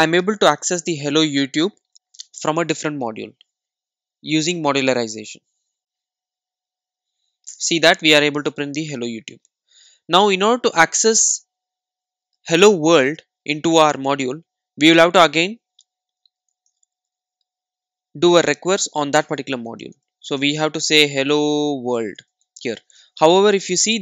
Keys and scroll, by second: 16.5 super+d, 17.1 super+d.